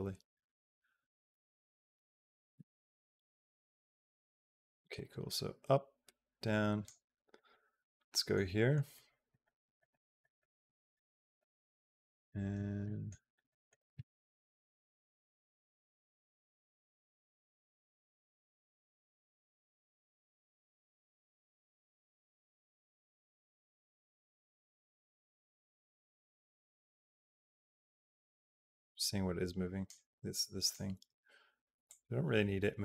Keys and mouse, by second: 7.2 middle click, 8.0 middle click, 8.5 middle click, 8.7 middle click, 9.1 middle click, 9.6 middle click, 10.1 middle click, 10.8 middle click, 12.7 middle click, 13.4 middle click, 14.6-29.7 drag, 30.4 click, 31.7-32.8 drag.